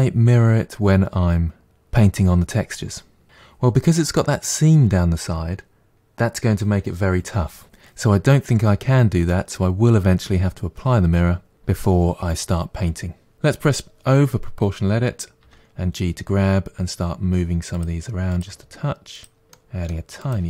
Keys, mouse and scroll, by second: 13.3 o, 15.4 g, 18.3 click, 18.5 g, 19.5 click, 19.6-20.4 typing, 20.2 middle click, 20.3 click.